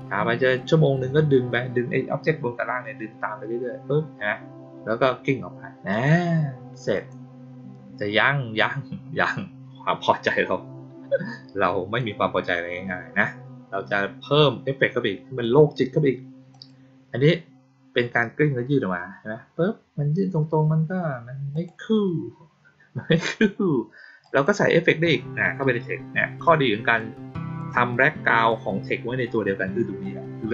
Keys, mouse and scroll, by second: 5.8 click, 6.9 click, 11.9-15.3 drag, 16.4 click, 21.4 click, 24.2 click, 24.4 click, 26.4-26.9 drag, 27.5 click.